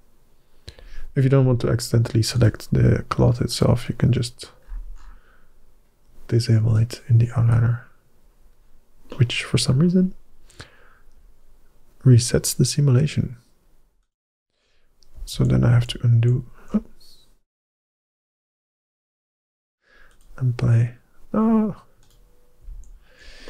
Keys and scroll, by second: 14.3 g, 15.2 ctrl+z, 15.6 ctrl+z, 16.0 ctrl+z, 17.7 ctrl+shift+z, 22.5 ctrl+z.